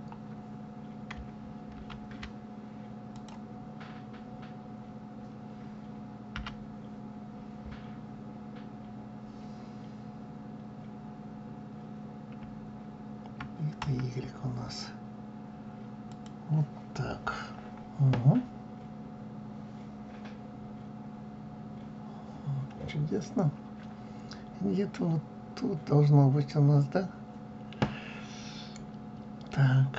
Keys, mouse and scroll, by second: 12.8 click, 12.8 right click, 13.0 click, 13.0 right click, 13.2 click, 13.2 right click.